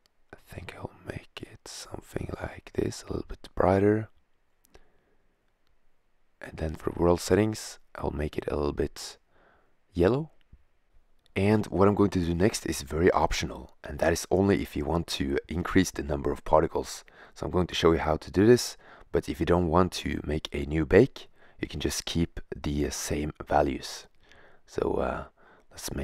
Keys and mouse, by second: 6.2-7.7 drag, 15.1 shift+z, 15.1 click, 16.7-17.7 drag, 17.7 right click, 18.4 middle click, 18.6-19.6 drag, 20.0-21.6 middle drag, 22.1-24.0 drag, 25.4 0.